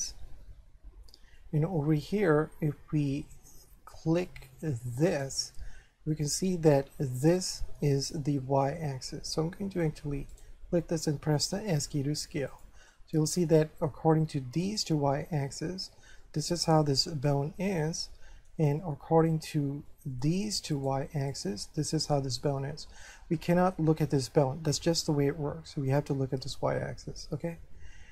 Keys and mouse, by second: 1.4 middle click, 3.5 shift+middle click, 5.1 right click, 9.3 middle click, 10.3 right click, 11.6 s, 12.5 click, 12.9 shift+middle click, 14.6 shift+right click, 16.2 middle click, 18.1 shift+middle click, 19.9 shift+middle click, 20.8 right click, 21.3 shift+right click, 23.4 middle click.